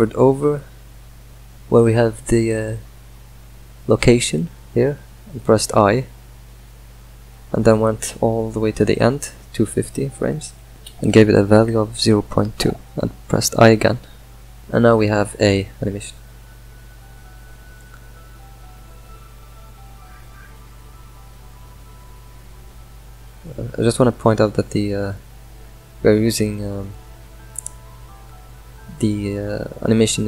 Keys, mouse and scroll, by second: 5.5 i, 7.1 space, 7.6 space, 7.8 drag, 8.4 space, 8.7 space, 9.8-12.9 drag, 12.9 i, 15.9 space, 17.8-24.5 middle drag, 24.5 scroll down 2, 24.9 middle click, 25.3 scroll down 3, 25.7-26.6 middle drag, 26.6 click, 27.1 Delete, 27.5 click, 28.4 click.